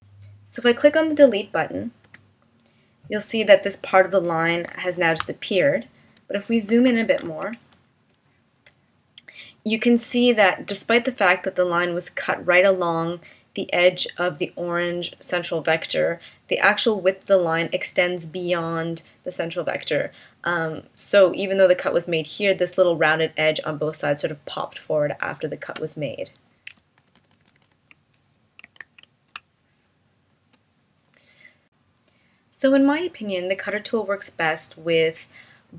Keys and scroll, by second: 2.1 BackSpace, 4.7 v, 7.7 space, 27.0 super+-, 28.8 super+z, 29.3 space.